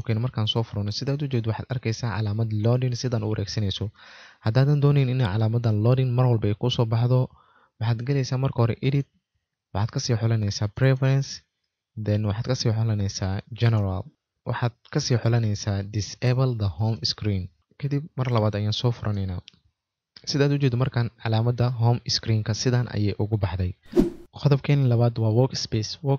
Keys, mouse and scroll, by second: 0.5 typing, 13.7 click, 20.0 click, 20.1 typing.